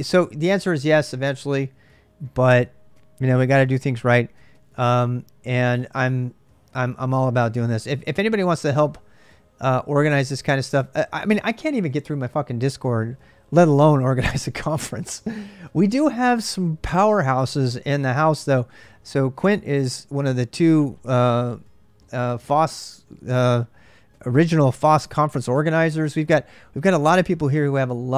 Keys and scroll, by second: 0.0 k.